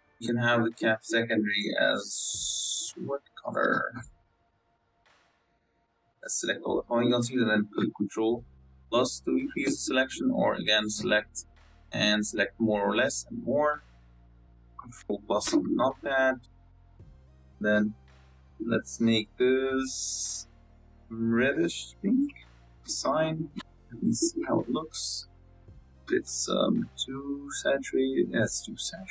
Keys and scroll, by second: 1.7 Tab, 8.2 ctrl+KP_Add, 14.9 ctrl+KP_Add, 16.4 ctrl+KP_Add, 24.0 Tab, 24.5 KP_0, 25.1 y, 25.4 y, 26.0 z.